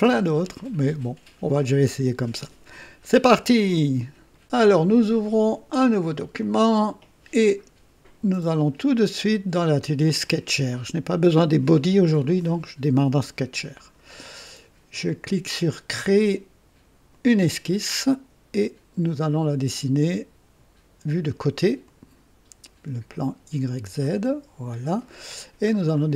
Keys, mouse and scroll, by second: 4.3 right click, 6.4 click, 8.5 click, 10.0 click, 17.1 click, 21.8 click, 24.2 click, 25.2-25.6 scroll down 2, 25.9-26.1 right drag.